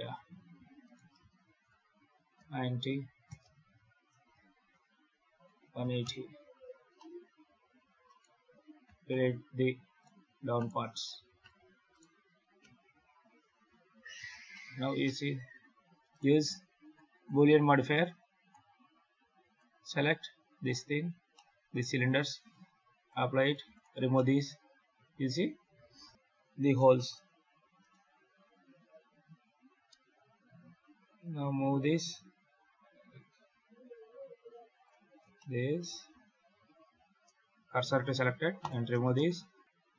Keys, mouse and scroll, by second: 0.7 right click, 1.3 shift+d, 4.4 shift+d, 6.5 alt+a, 6.9 middle click, 7.3 scroll up 3, 8.0 right click, 8.7 x, 9.9 right click, 10.5 right click, 11.0 x, 11.8 right click, 12.5 KP_7, 12.8 alt+a, 13.5 ctrl+s, 14.0 scroll down 1, 14.4 shift+middle click, 14.9 middle click, 16.0 right click, 16.7 click, 17.0 click, 17.3 click, 19.3 click, 21.2 middle click, 22.8 click, 23.3 right click, 23.5 x, 24.0 middle click, 26.1 KP_7, 26.8 shift+middle click, 27.7 right click, 29.7 g, 35.0 scroll up 1, 35.2 shift+middle click, 36.8 shift+s, 38.0 x, 38.9 shift+a, 39.6 ctrl+z, 39.6 shift+a.